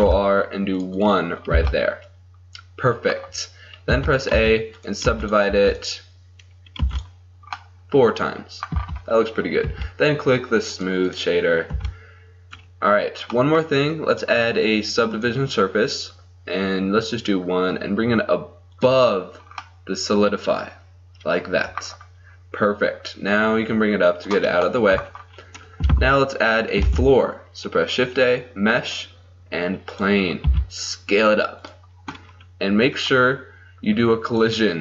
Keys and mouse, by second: 0.0 ctrl+r, 1.6 a, 3.0 click, 4.0 a, 4.4 w, 5.1 w, 5.5 w, 6.8 w, 8.8 Tab, 9.7 t, 10.8-11.8 drag, 11.8 t, 14.2-17.1 drag, 18.8 click, 19.5-20.8 drag, 23.4 click, 24.9-26.9 drag, 26.9 shift+a, 30.5 s, 33.0-34.8 drag.